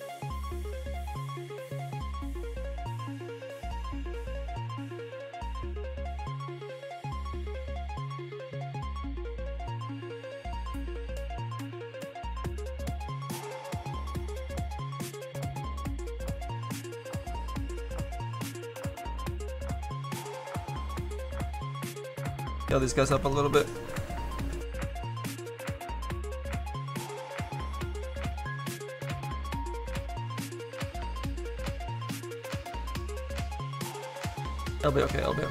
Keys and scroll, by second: 32.0 z, 33.3 z.